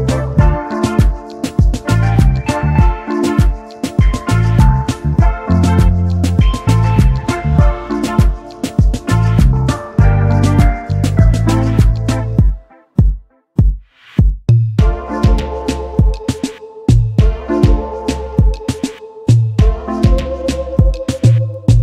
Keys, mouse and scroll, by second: 0.9-1.5 alt+scroll down 1, 4.2 double click, 10.5-11.0 alt+scroll up 1, 11.3 space, 11.4 double click, 12.0-12.5 alt+scroll up 1, 13.2 space, 13.3 double click, 14.6 click, 15.1 alt+click, 18.3-19.2 alt+scroll down 1, 19.4-19.8 alt+scroll down 1, 20.4 space, 20.5 double click, 21.7 alt+scroll up 1.